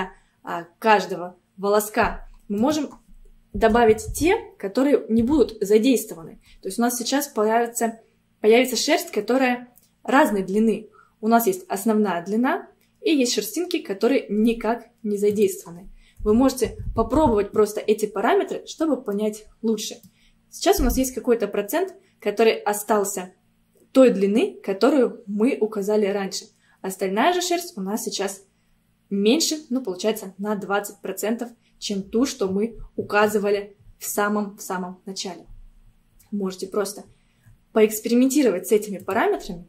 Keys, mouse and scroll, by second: 2.6-5.8 drag, 8.5-9.0 scroll up 1, 10.5-10.9 scroll up 1, 15.4-18.4 drag, 18.8-19.2 scroll down 1, 19.2-22.2 middle drag, 32.5-35.0 scroll up 20, 35.5-35.9 scroll down 1, 36.3 scroll down 9, 37.9-39.0 scroll down 1, 39.0-39.6 drag.